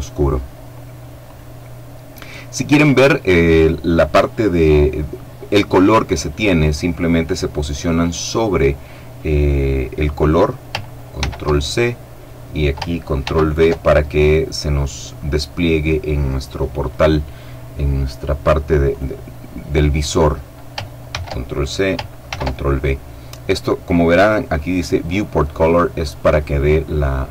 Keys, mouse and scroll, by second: 0.9 click, 10.8 ctrl+c, 12.9 ctrl+v, 18.6 right click, 20.8 ctrl+c, 22.0 ctrl+v.